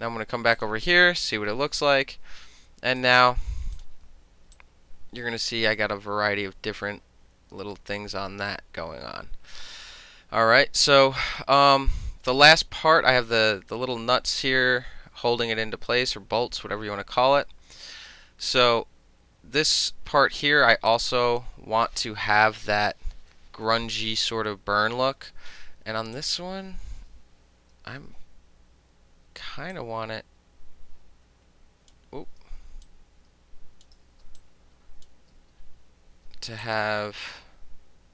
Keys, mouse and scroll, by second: 0.6 click, 0.7-3.0 middle drag, 3.0 click, 3.1 middle click, 3.8 click, 3.9 middle click, 4.6 click, 12.3 click, 20.9 click, 22.9 ctrl+-, 23.5 space, 26.2 click, 27.3 ctrl+t, 29.8-32.0 shift+drag, 32.0 shift+middle click, 32.9-33.9 drag, 33.9 shift+middle click, 34.3 space, 34.4 click, 36.7-38.1 drag.